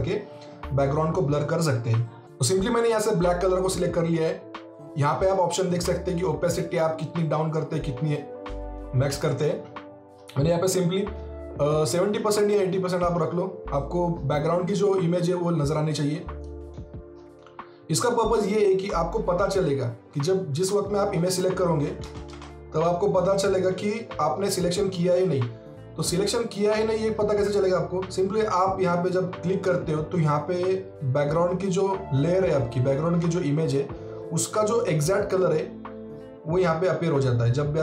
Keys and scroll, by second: 22.0 alt+Tab.